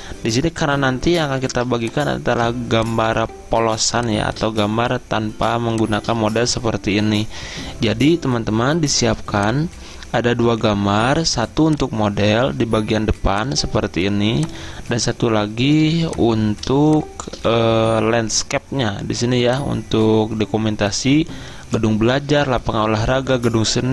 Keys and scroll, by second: 1.5 z, 15.8 z.